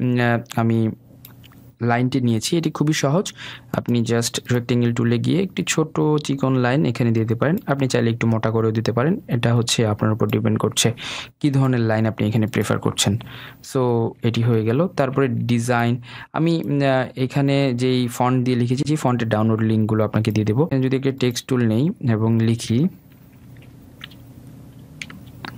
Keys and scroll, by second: 3.3 Delete.